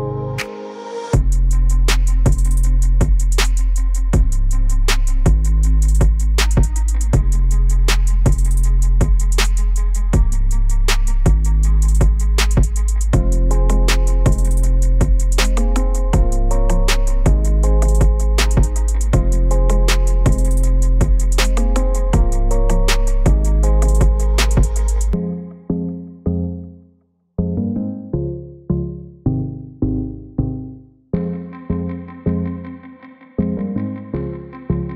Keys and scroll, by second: 0.0-4.0 typing, 17.0 shift+space, 17.5-22.7 shift+space, 34.1 space, 34.6-34.9 space.